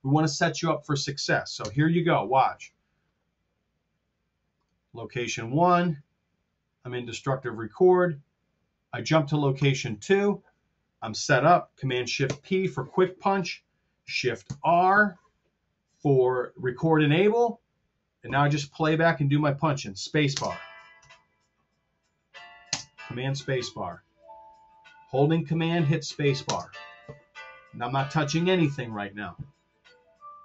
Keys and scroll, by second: 2.7 super+z, 12.2 shift+super+p, 14.3 shift+r, 20.3 space, 22.7 super+space, 26.5 super+space.